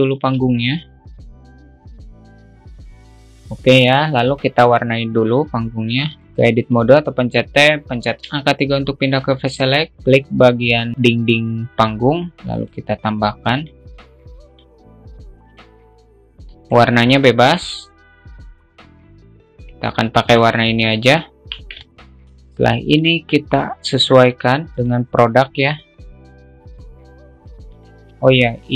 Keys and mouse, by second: 0.5 shift+a, 1.4 s, 1.7 alt+middle click, 2.0 s, 2.2 Tab, 3.0 alt+middle click, 3.2 middle click, 3.4 Tab, 3.9-4.3 alt+middle drag, 5.8 click, 7.0 Tab, 8.9 3, 10.0 click, 13.1 click, 14.1 click, 14.9 drag, 15.9 click, 21.8 Tab, 22.4 shift+middle click, 23.2 shift+middle click, 24.3-25.5 drag, 26.2-28.0 drag, 28.1 shift+middle drag.